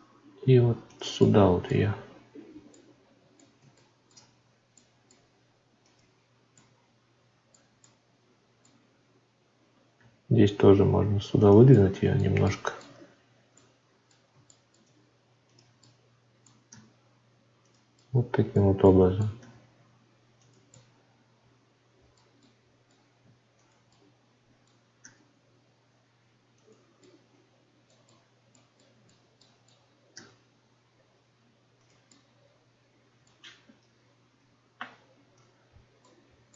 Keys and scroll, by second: 34.3 Tab.